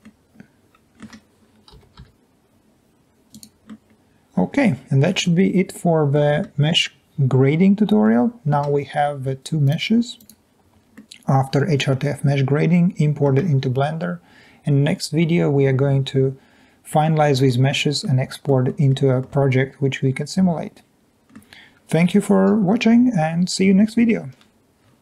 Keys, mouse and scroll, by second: 0.3 click, 1.9 g, 2.1 y, 3.7 middle click, 5.4 scroll down 2, 5.8 middle click, 6.5 Tab, 7.0 click, 11.2-13.2 middle drag, 17.0-18.1 middle drag, 18.6 middle drag, 19.2-21.3 middle drag.